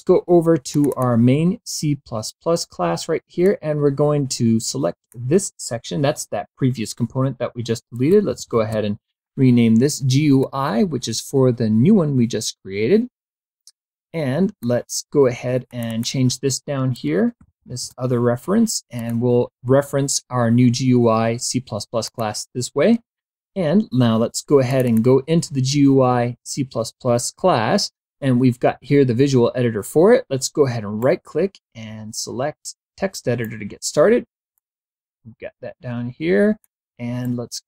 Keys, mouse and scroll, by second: 0.9 click, 3.6-5.4 drag, 8.2-9.2 typing, 10.5-14.9 drag, 15.8 click, 17.3-18.3 typing, 19.1 click, 22.2 click, 24.8 click, 31.1-33.8 right drag, 34.7-36.9 drag, 37.4-37.6 right drag.